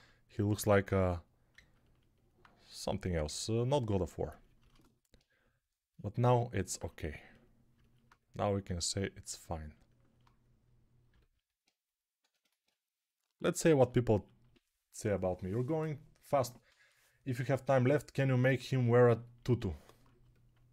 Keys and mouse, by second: 12.1 1.